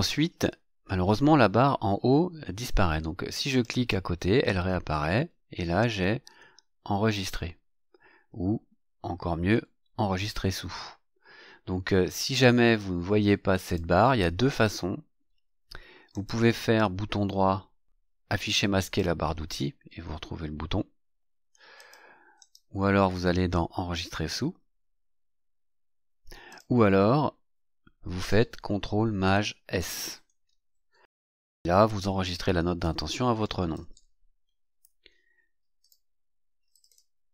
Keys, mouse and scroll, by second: 3.4 click, 13.6 click, 16.1 right click, 18.8 click, 21.7 click, 22.4 right click, 26.5 click, 29.7 ctrl+shift+s, 33.2-34.4 typing, 35.8 click, 36.7 click.